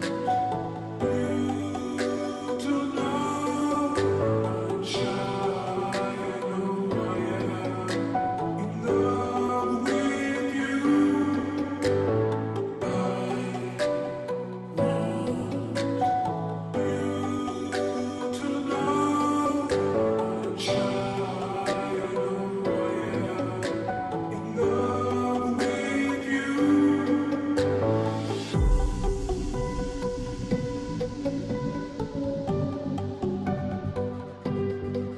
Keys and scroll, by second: 0.0-35.1 typing, 28.7 ctrl+t, 31.0 Return.